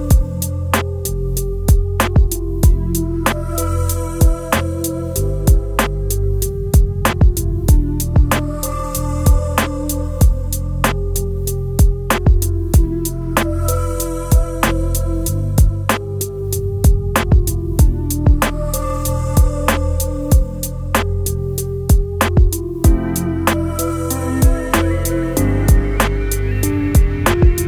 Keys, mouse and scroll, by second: 15.2 scroll down 1.